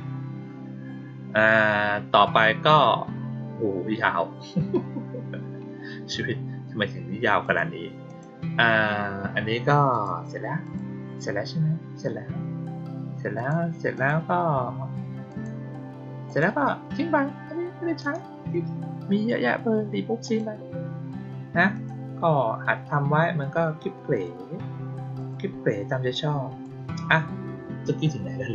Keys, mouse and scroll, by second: 7.3 click, 8.0 click, 9.8 click, 10.6 click, 13.3 click, 13.9 click, 15.2 click, 16.2 click, 17.9 right click, 20.2 click, 21.7 click, 24.1 click, 25.1 click, 26.0-26.5 drag.